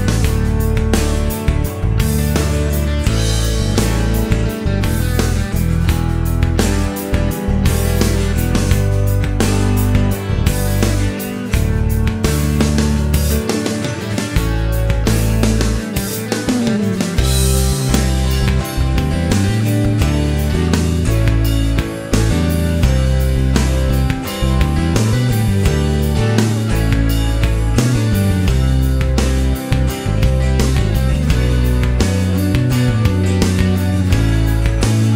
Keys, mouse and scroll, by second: 1.8 click, 8.0-10.5 middle drag, 12.2-13.4 drag, 14.2 click, 16.0 middle click, 18.6 click, 19.3 click, 20.5 shift+right click, 23.5 click, 26.6 click, 28.4 click, 29.4 middle click, 31.4 click, 33.6 click, 34.6 click.